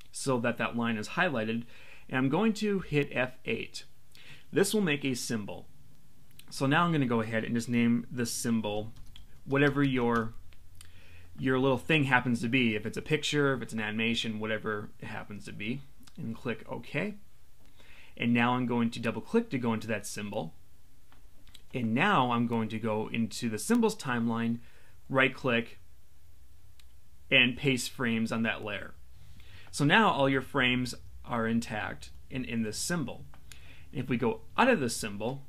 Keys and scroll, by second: 2.8 F8, 8.9 shift+a.